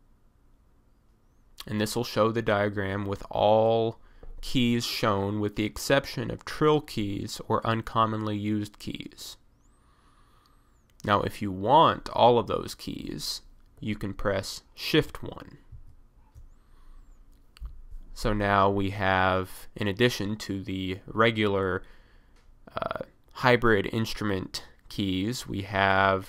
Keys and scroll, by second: 15.8 shift+1.